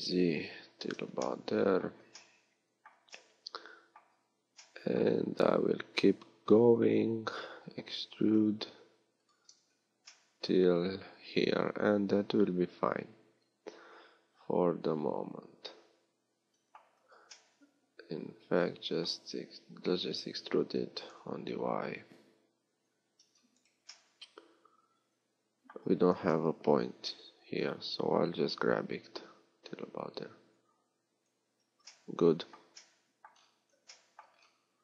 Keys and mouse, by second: 4.0 z, 5.2 z, 7.5 e, 16.8 z, 24.0-26.3 drag, 26.3 KP_3, 31.7 z.